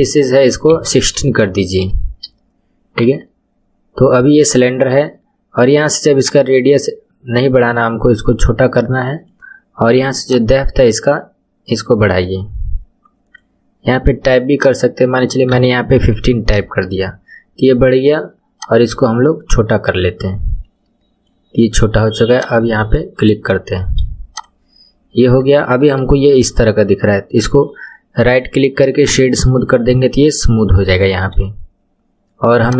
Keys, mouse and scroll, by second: 3.4 scroll down 2, 6.2-9.3 drag, 10.2-13.3 drag, 14.5-17.5 drag, 18.5-21.5 drag, 22.3 click, 22.8-23.4 scroll up 5, 23.4-24.3 shift+middle drag, 24.3 click, 24.9-25.5 scroll up 6, 25.5-25.9 shift+middle drag, 25.9-26.2 scroll up 6, 27.4-29.8 right drag, 29.8-30.7 scroll down 10, 30.9-31.4 shift+middle drag, 31.4-32.6 scroll down 2, 32.6 click.